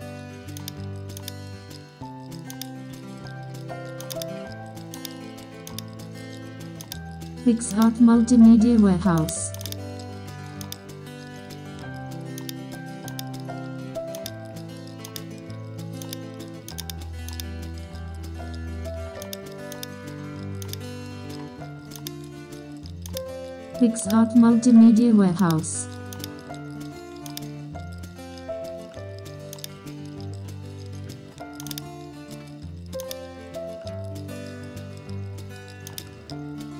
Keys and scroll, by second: 6.4 super+t, 11.0 super+t, 12.0 Escape, 12.7 super+t, 20.0 super+t, 22.3 super+t, 23.3 super+t, 26.4 super+t, 33.6 super+], 34.4 super+], 35.5 super+t.